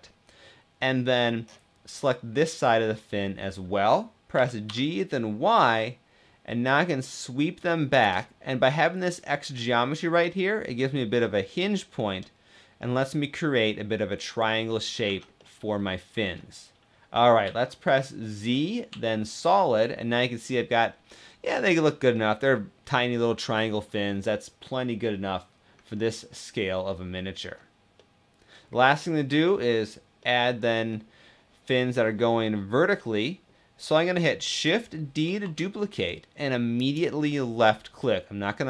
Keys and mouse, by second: 4.1 g, 4.4 y, 7.7 click, 12.5-14.7 middle drag, 14.8 Tab, 15.1-17.2 middle drag, 17.2 z, 19.4-21.5 middle drag, 21.9-23.6 middle drag, 24.0-25.5 middle drag, 26.0-27.3 middle drag, 28.1-28.7 middle drag, 29.9-32.7 middle drag, 32.7 middle click, 35.0 shift+d, 36.5 click.